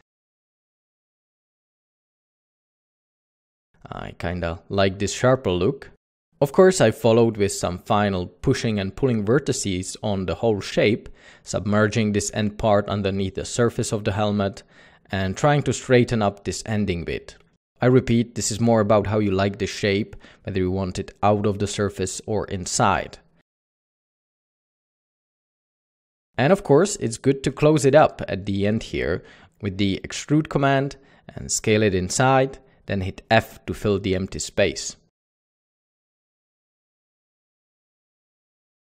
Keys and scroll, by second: 0.8 ctrl+r, 0.9 Tab, 3.2 ctrl+r, 4.2 ctrl+r, 4.9 Tab, 6.1 Tab, 7.0 Escape, 7.3 o, 9.3 Tab, 9.5-11.4 typing, 10.9 Escape, 12.4 Tab, 12.6 a, 14.0 alt+a, 15.1 c, 17.6 c, 18.8 Tab, 20.7 Tab, 21.6 b, 21.6 c, 23.1-25.3 typing, 26.5 Tab, 27.3 ctrl+ě, 31.0 typing, 33.0-33.7 typing, 33.5 Tab, 36.0 alt+a, 37.4 Tab.